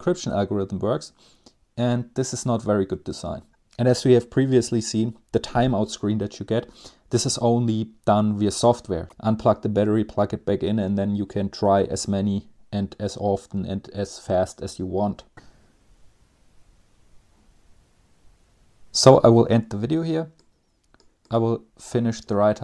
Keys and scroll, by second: 15.3 Page_Up, 15.3 Down, 21.9 Page_Down, 22.4 Page_Down.